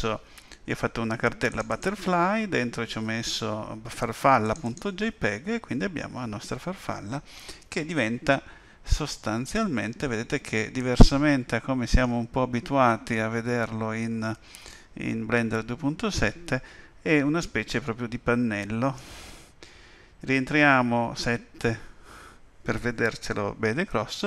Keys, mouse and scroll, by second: 1.5 click, 1.7 click, 4.4 click, 4.9 click, 9.1 middle click, 12.9 middle click, 21.3 KP_7.